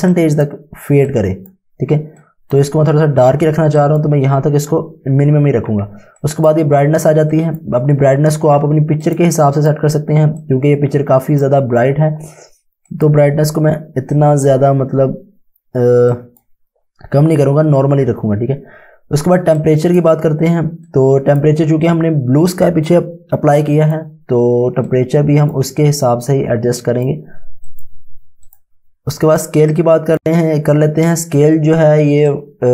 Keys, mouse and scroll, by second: 8.8 space, 9.1 click, 9.6 click, 9.8 Home, 10.5 click, 19.6 click.